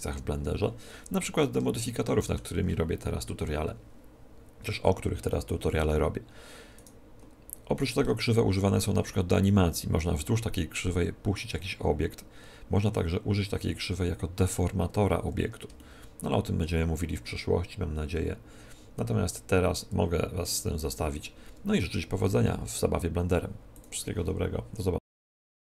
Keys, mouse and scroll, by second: 0.9 click, 1.2 middle click, 1.3 click, 1.4 middle click, 1.5 click, 1.6-3.5 middle drag, 6.7-8.6 right drag, 14.9-17.5 middle drag.